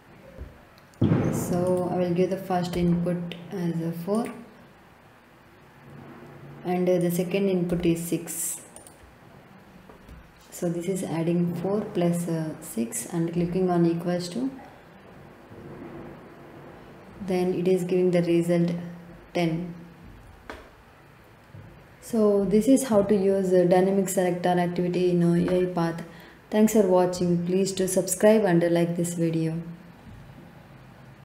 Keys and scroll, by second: 2.7 4, 7.6 6.